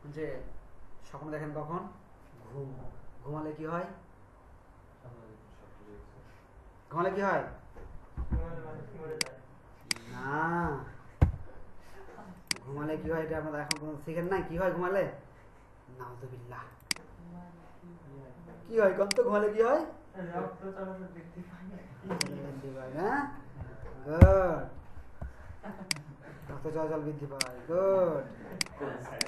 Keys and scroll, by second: 11.4 z, 24.2 ctrl+shift+o.